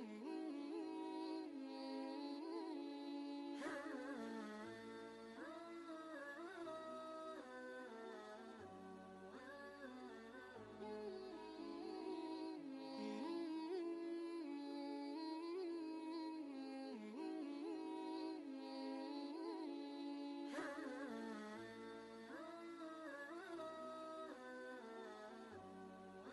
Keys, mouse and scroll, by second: 8.8 space, 8.9 click, 9.4 space, 12.4 click, 13.4-13.8 scroll up 1, 15.1 typing, 15.3 click, 17.3 scroll down 1, 17.3 typing.